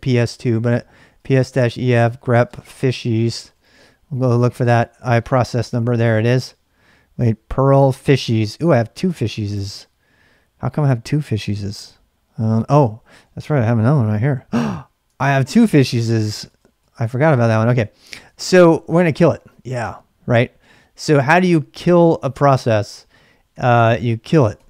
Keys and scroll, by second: 0.8-4.2 typing, 13.6 ctrl+b, 13.8 n, 15.5 ctrl+b, 15.9 ctrl+n, 16.5 ctrl+b, 16.7 n, 18.0-19.2 typing, 23.5-24.6 typing.